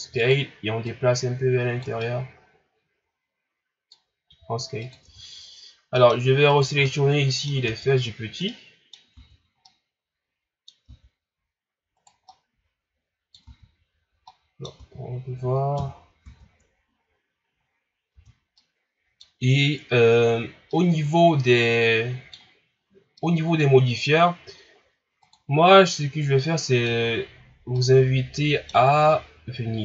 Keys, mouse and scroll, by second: 0.9 click, 2.0-4.2 middle drag, 4.2 s, 5.0 Tab, 6.0 middle click, 6.5 right click, 6.8 middle click, 7.7 Tab, 8.5 middle click, 9.2 Tab, 9.6-10.9 middle drag, 10.9 Tab, 12.0 right click, 12.3-13.5 middle drag, 13.5 Tab, 14.3 middle click, 14.8 Tab, 15.8 KP_1, 16.2 Tab, 17.1-17.7 scroll down 2, 17.7 scroll up 3, 18.1 Tab, 18.6-20.5 middle drag, 20.5 scroll down 1, 20.7-22.9 middle drag, 22.9 scroll down 2, 23.2-25.2 middle drag, 25.2-26.4 drag, 26.4 middle click, 27.1-27.7 scroll up 3, 27.7-29.8 middle drag.